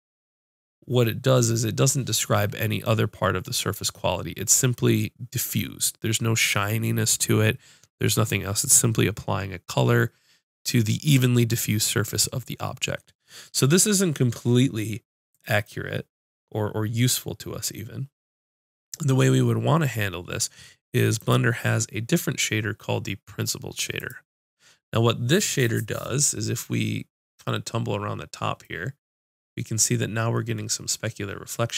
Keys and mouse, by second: 21.2-31.7 drag.